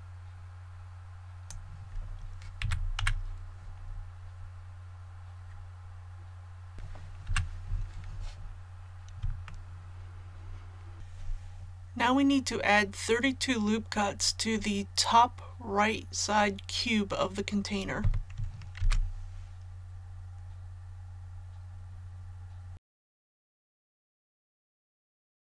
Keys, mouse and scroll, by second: 2.5 a, 2.9 KP_1, 3.6 scroll down 1, 6.7 click, 7.2 KP_3, 8.5-9.1 scroll down 1, 9.4 shift+middle click, 10.9 click, 18.7 ctrl+r, 20.5-23.7 scroll up 1, 23.7 click, 23.9 Tab, 24.0 click.